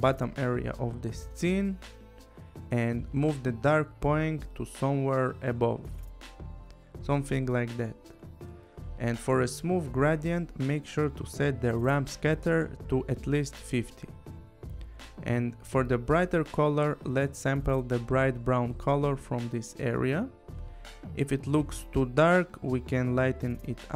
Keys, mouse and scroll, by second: 3.2 click, 7.3 click, 12.3 click, 12.6 5, 13.5 Return, 17.6 click, 19.2 click.